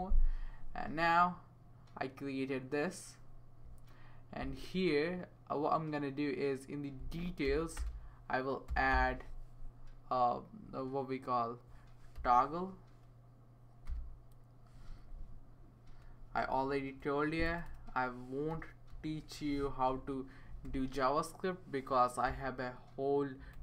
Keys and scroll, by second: 7.8-9.4 typing, 12.1 t, 13.9 o, 15.0 Left, 16.8 Right, 17.5-18.9 typing, 19.8 Down, 20.0 Down, 20.6 Return, 22.2 =, 23.5-23.6 typing.